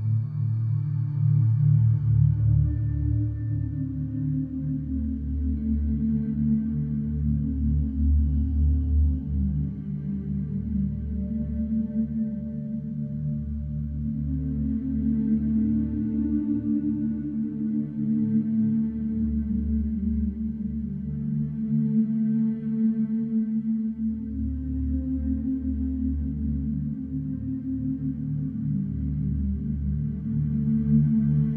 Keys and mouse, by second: 0.5-1.7 shift+drag, 1.7-3.9 shift+middle drag, 7.7 ctrl+b, 12.9 Tab, 19.8 shift+a, 21.7 s, 21.8 z, 23.3 KP_1, 25.0 1, 25.0 KP_1, 25.8 click, 27.1 s, 27.2 x, 29.0 s, 29.3 x.